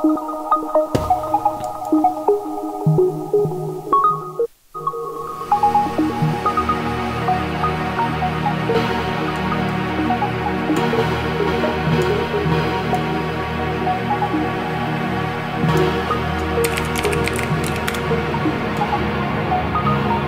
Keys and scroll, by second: 4.9 space, 16.3-17.8 typing.